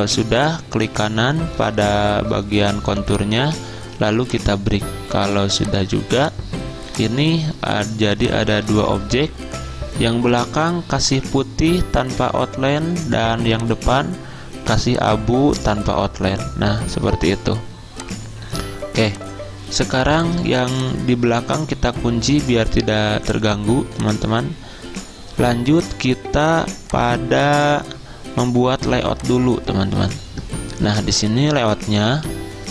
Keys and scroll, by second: 8.8 ctrl+z, 27.4 z.